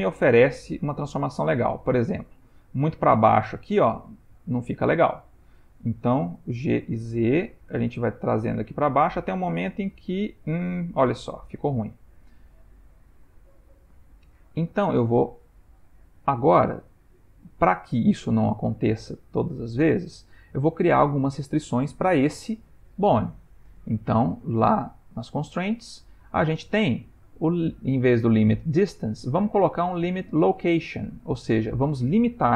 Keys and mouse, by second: 6.6 g, 15.4 click, 24.6 click, 25.4 click.